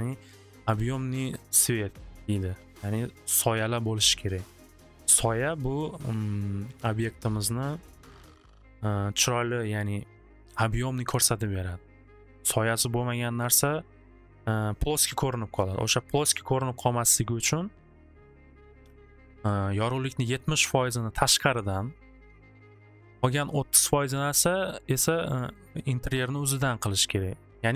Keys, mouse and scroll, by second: 19.2 click, 19.6 click, 21.4 c.